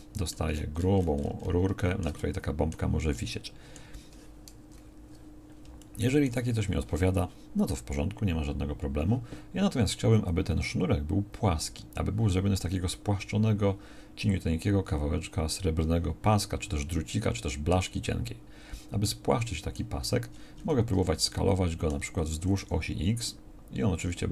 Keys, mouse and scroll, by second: 4.7 KP_1, 22.4 s.